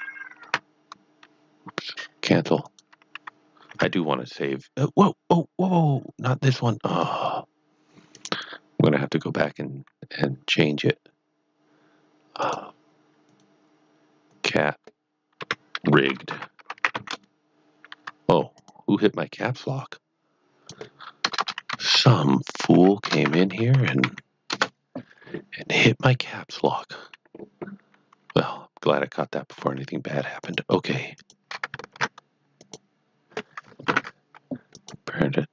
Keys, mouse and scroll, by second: 0.4 ctrl+q, 2.6 click, 6.8 s, 6.9 click, 8.1 click, 12.4 click, 15.4 Right, 16.1-17.3 typing, 17.9 Caps_Lock, 18.5 click, 21.2 BackSpace, 21.9 shift+r, 22.9-24.5 typing, 24.5 Return, 26.6 click, 28.5 middle click, 30.4 click, 31.2 shift+click, 32.0 Tab, 32.5 click, 34.7 click.